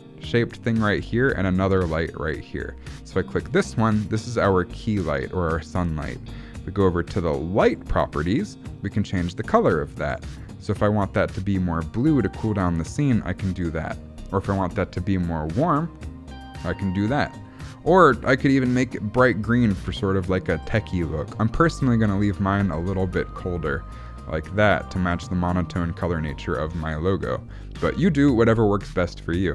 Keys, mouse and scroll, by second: 3.5 click, 7.7 click, 10.1 click, 18.3 click.